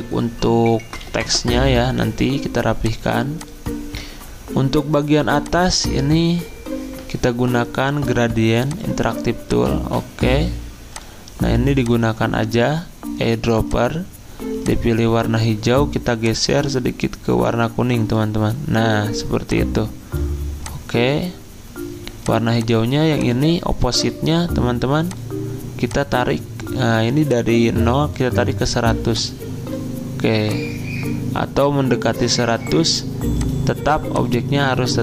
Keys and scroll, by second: 1.0 z.